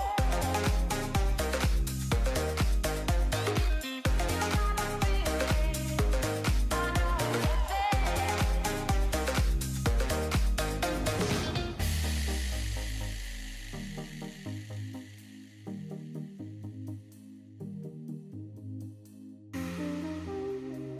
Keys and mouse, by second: 2.8 drag, 5.2-6.8 drag, 7.4-8.8 drag, 10.2 ctrl+shift+click, 10.7 middle click, 11.4 middle click, 11.8 middle click, 12.4 click, 14.0-15.9 drag, 16.6 ctrl+s, 17.3 middle click, 17.7 middle click, 18.5 ctrl+shift+click, 19.5 middle click, 20.3 shift+click.